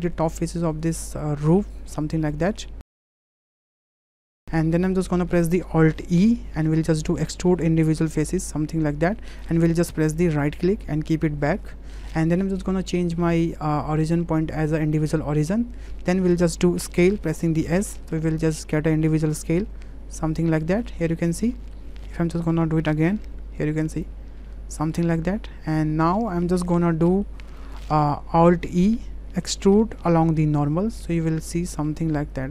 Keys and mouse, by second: 0.2 shift+click, 0.4 shift+click, 0.8 shift+click, 1.8 shift+click, 2.3 shift+drag, 3.1 shift+drag, 3.3 middle drag, 3.6 shift+drag, 3.9-4.3 shift+drag, 4.4 middle click, 4.8 shift+click, 5.2 middle click, 6.1 alt+e, 14.0-15.5 drag, 15.9 middle click, 17.4 s, 20.6 middle drag, 21.7 middle click, 22.1 ctrl+z, 23.3 s, 27.0 middle click, 28.7 alt+e.